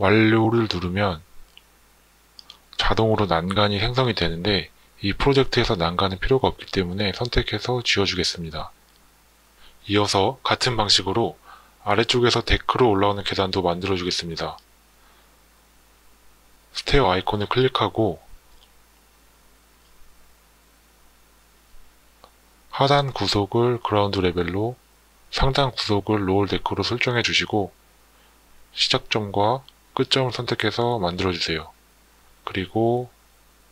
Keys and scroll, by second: 5.7 Delete, 20.7 Escape.